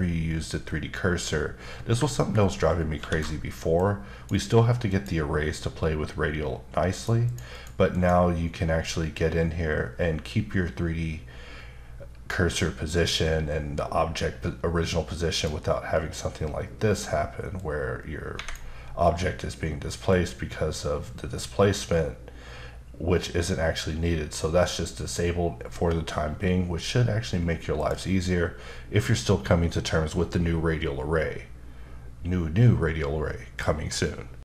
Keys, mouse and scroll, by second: 3.7 click, 4.9 click, 6.9 click, 7.2 click, 7.5 double click, 7.9 click, 15.3 click, 17.5 click, 18.3 Escape, 20.1 click, 27.8 click.